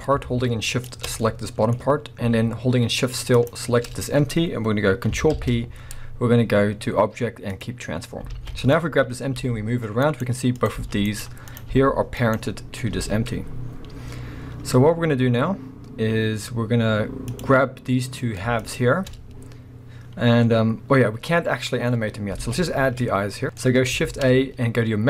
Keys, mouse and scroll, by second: 0.6 shift+click, 1.2-3.4 middle drag, 3.4 shift+click, 5.4 ctrl+p, 8.3 alt+a, 8.6 click, 9.3 g, 10.2 right click, 10.5 click, 10.8 g, 11.2 right click, 11.5 click, 11.7 g, 12.4 right click, 12.9 KP_1, 13.6-15.8 scroll down 1, 15.8-17.3 scroll up 1, 17.3 click, 18.6 shift+click, 20.3-22.0 scroll up 1, 22.0-22.4 scroll down 1, 22.4 alt+a, 22.7-23.4 scroll up 1, 23.4-25.0 middle drag, 23.4 x, 24.0 shift+a.